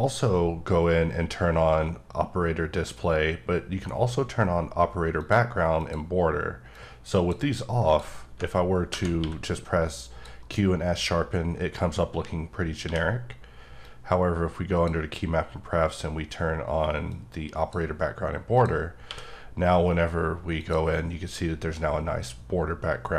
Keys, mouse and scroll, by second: 5.1 click, 5.7 click, 6.7 click, 7.8 click, 9.2 q, 10.0 click, 13.8 click, 17.0 click, 18.5 click, 19.0 q, 20.5 click.